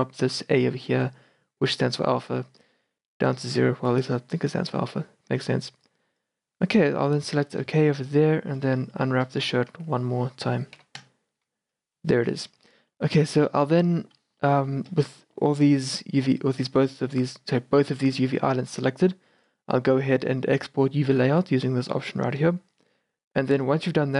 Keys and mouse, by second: 8.3-9.8 middle drag, 9.8 Tab, 10.8 u, 12.6 a, 13.4 a, 15.2 a, 19.5-21.7 drag.